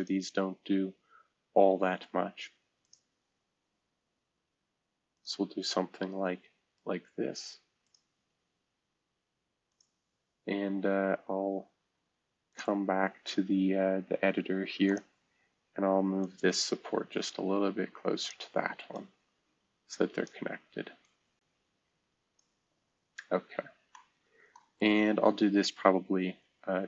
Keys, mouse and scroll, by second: 0.0 click, 2.8 click, 5.1 click, 5.5-6.4 drag, 5.6-6.4 middle drag, 6.4-7.8 right drag, 7.8-9.0 drag, 9.7 click, 12.5-24.7 drag, 24.7-26.8 middle drag.